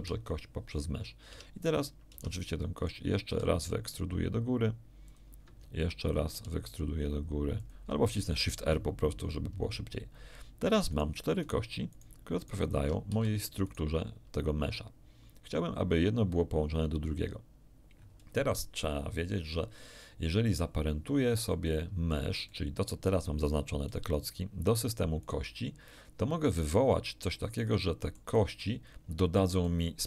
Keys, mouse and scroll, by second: 1.2 Tab, 2.1 Tab, 2.7 click, 3.2 e, 5.0 ctrl+click, 6.2 shift+e, 7.6 ctrl+click, 8.3 ctrl+shift+r, 10.8 right click, 11.4 right click, 11.9 right click, 12.4 right click, 12.7 Tab, 13.0 z, 13.6 right click, 21.4 middle click, 22.1 z, 22.4-23.6 middle drag, 25.2 right click, 26.6-28.3 middle drag, 28.6 middle click.